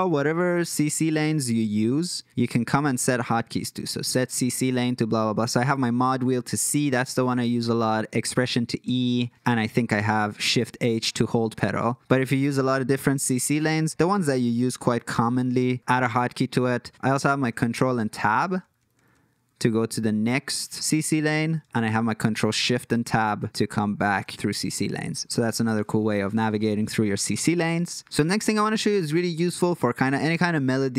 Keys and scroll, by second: 1.6 shift+c, 1.8 shift+c, 13.2 alt+k, 17.5 ctrl+Tab, 17.7 ctrl+Tab, 17.9 ctrl+Tab, 18.1 ctrl+Tab, 18.3 ctrl+Tab, 18.4 ctrl+Tab, 18.6 ctrl+Tab, 18.7 ctrl+Tab, 18.9 ctrl+Tab, 19.1 ctrl+Tab, 21.9 ctrl+shift+Tab.